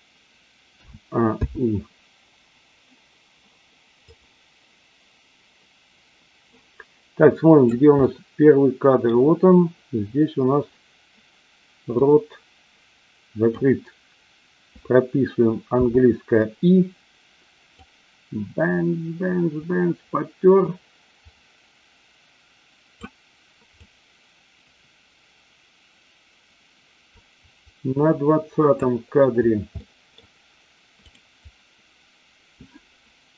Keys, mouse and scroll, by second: 0.8 a, 1.4 i, 4.0-7.6 drag, 7.9-9.0 middle drag, 12.0-13.6 drag, 17.8-22.9 drag, 23.8-28.6 drag, 29.6 middle click, 31.0 click.